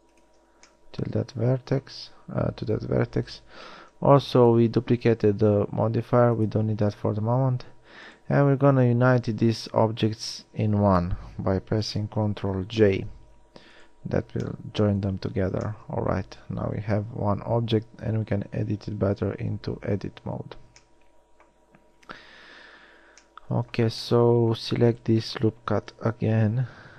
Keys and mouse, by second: 4.1 Tab, 12.4 ctrl+j, 15.6 Tab, 17.1 a, 26.6 KP_1.